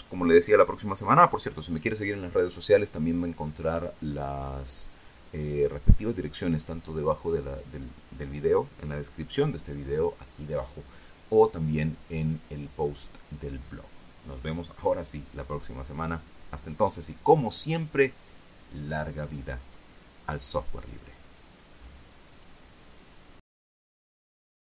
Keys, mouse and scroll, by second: 22.9 click, 23.2 middle click, 24.6 click.